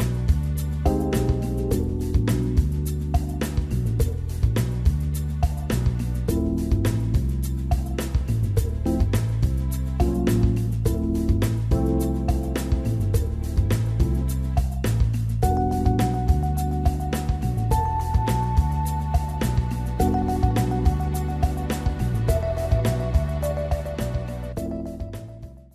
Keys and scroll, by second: 7.6 ctrl+g.